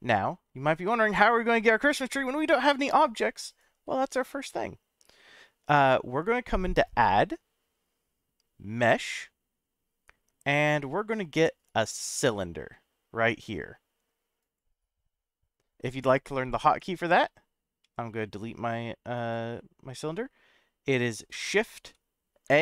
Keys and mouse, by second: 2.3-2.7 drag, 3.5 click, 7.0-14.6 drag, 17.8 x, 21.8 shift+a.